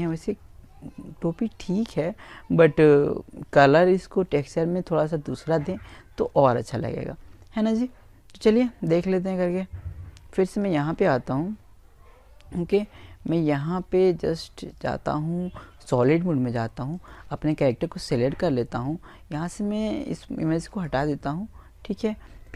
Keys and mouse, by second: 8.5 click, 10.2-12.0 middle drag, 12.5 click, 14.7-16.5 right drag, 18.4 click.